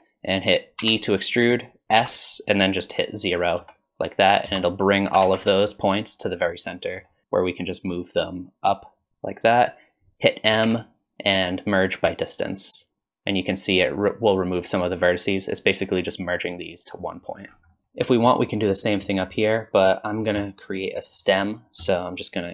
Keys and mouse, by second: 0.8 e, 5.2 alt+z, 6.5 middle click, 7.7-10.7 drag, 10.7 m, 17.7 middle click, 18.5 middle click, 21.3 middle click.